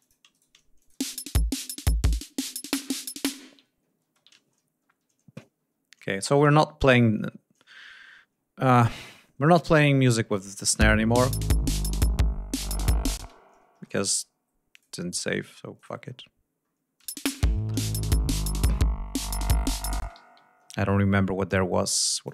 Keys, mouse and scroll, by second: 0.3 shift+right click, 0.7 shift+click, 0.9 shift+space, 1.1-1.6 shift+scroll up 5, 3.6 ctrl+scroll down 2, 4.0 ctrl+space, 5.1 ctrl+scroll down 2, 6.1 scroll down 2, 6.7 ctrl+scroll up 2, 8.6 ctrl+scroll up 2, 10.6 click, 10.8 space, 13.2 space, 13.4 ctrl+scroll down 3, 14.7 click, 15.7 click, 16.1-16.8 scroll down 4, 17.0 space, 17.2-18.5 scroll up 6, 18.6-18.9 scroll down 2, 20.0 ctrl+space, 20.2 ctrl+d, 20.4 ctrl+scroll up 2, 21.5 click.